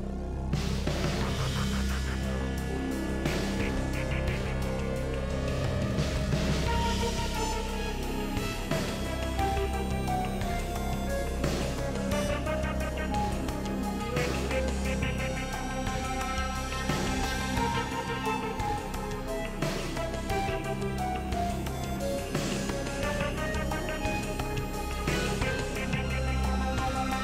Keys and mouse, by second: 0.2 KP_3, 3.3 e, 10.8 s, 12.0 g, 15.1 KP_Decimal, 16.1 s, 19.1 r, 24.1 shift+middle click, 26.6 alt+z, 26.8 click.